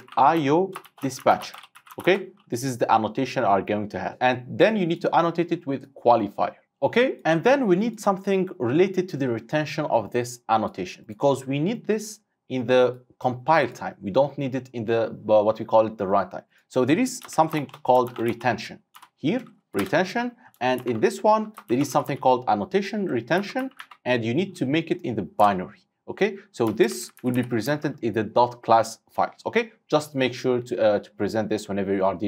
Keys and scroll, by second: 4.1 Return, 19.9 Return, 25.6 Return, 27.3 ctrl+shift+Left, 27.7 ctrl+shift+Right.